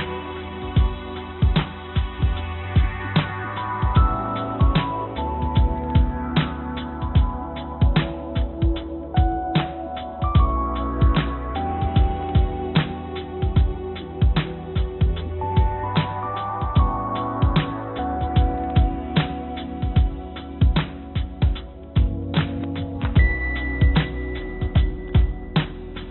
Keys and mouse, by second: 5.1-7.1 drag, 9.4-11.9 drag, 12.7-13.9 drag, 15.3 click, 17.1 click, 21.2 z, 24.5 click.